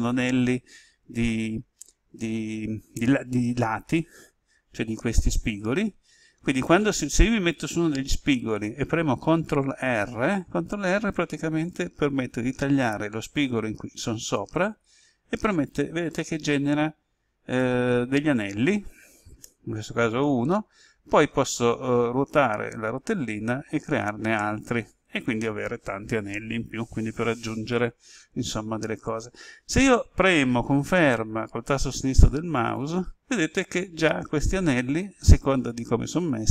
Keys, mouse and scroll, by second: 14.4 ctrl+r, 22.4-23.5 scroll up 1, 32.5 click.